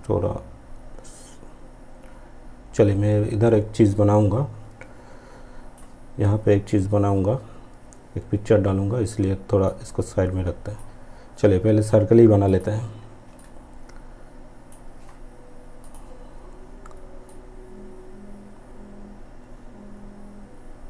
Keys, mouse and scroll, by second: 9.7-12.6 drag, 13.4-20.8 ctrl+drag.